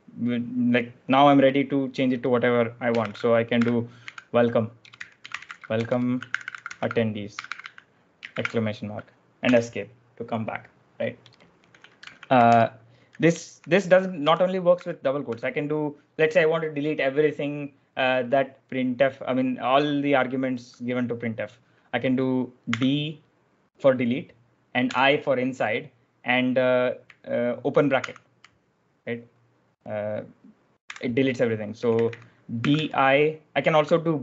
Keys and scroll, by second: 2.9-8.3 typing, 9.4 Escape, 11.8-15.6 typing, 22.6 d, 24.7 i, 27.9 shift+0, 30.8-33.1 typing.